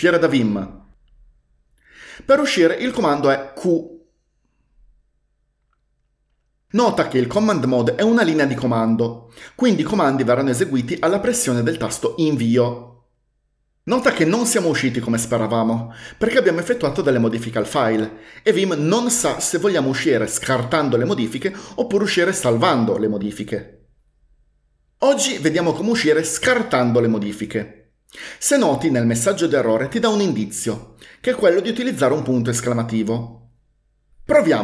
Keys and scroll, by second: 3.6 q, 12.3 Return.